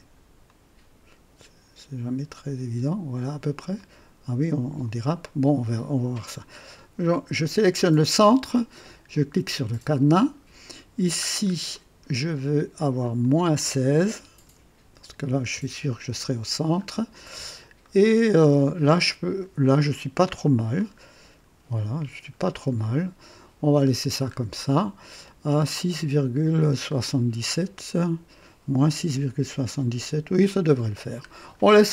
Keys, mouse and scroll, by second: 0.4 click, 3.7 click, 7.6 click, 9.5 click, 11.2 scroll down 2, 11.7-12.3 right drag, 13.0 click, 14.4 KP_Subtract, 14.9 KP_1, 15.1 KP_6, 15.5 Return, 16.7-17.6 scroll up 2, 17.8-18.6 right drag, 20.2-20.8 right drag, 21.0-21.3 scroll up 1, 22.1-22.4 scroll down 1, 22.8-23.5 right drag, 23.9-24.2 scroll down 2, 26.9-27.2 scroll up 1, 30.2-31.5 scroll down 2.